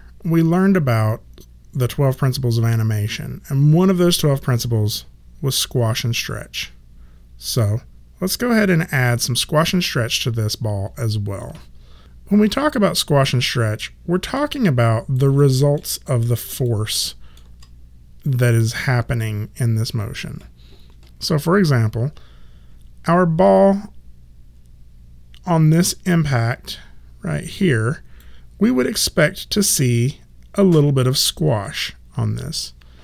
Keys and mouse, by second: 13.0 alt+middle click, 14.8 alt+right click, 15.3 alt+middle click, 16.0 alt+click, 16.9 alt+middle click, 23.5 click, 29.8 click.